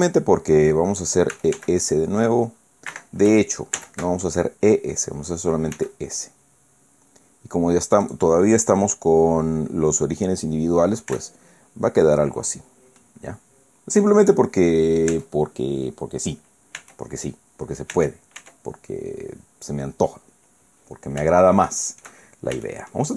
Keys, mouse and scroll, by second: 0.2 shift+scroll down 2, 1.3 e, 1.6 s, 2.9 Escape, 3.8 ctrl+z, 5.8 s, 8.0 click, 11.1 Tab, 13.0 middle click, 15.1 Tab, 16.8 Tab, 17.9 Tab, 18.6-19.0 scroll down 1, 19.5 scroll down 1, 20.1-20.5 scroll down 1, 21.4 shift+middle click, 22.6 shift+click.